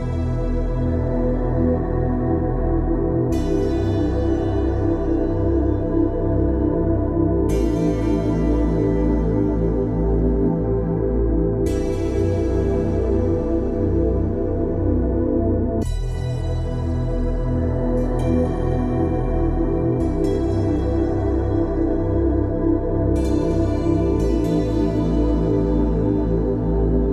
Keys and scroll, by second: 8.2 Escape, 21.8 Escape, 23.9 Escape.